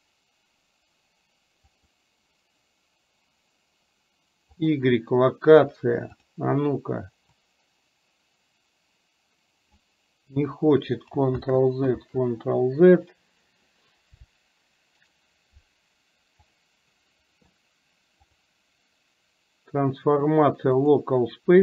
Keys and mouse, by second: 6.2 click, 7.6-10.0 drag, 11.5 ctrl+z, 12.2 ctrl+z.